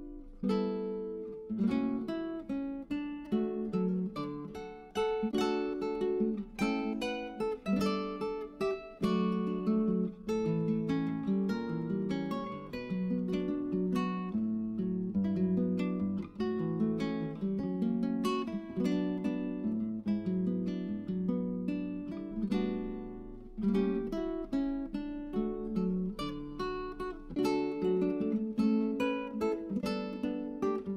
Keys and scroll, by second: 15.7-17.3 typing, 28.2-29.4 typing.